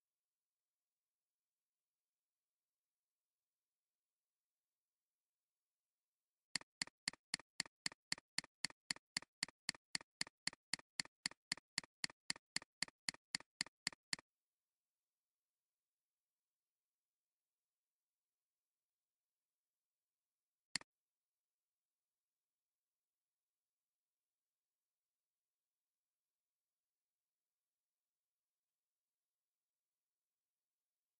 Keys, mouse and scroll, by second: 6.7 double click, 20.7 click.